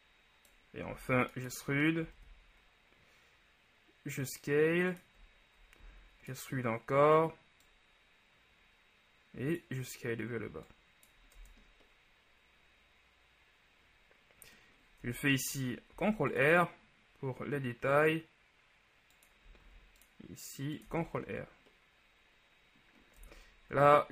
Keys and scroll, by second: 1.0 e, 5.9 shift+e, 11.6 Tab, 15.2 Tab, 16.0 ctrl+r, 19.7 ctrl+r, 21.0 Tab.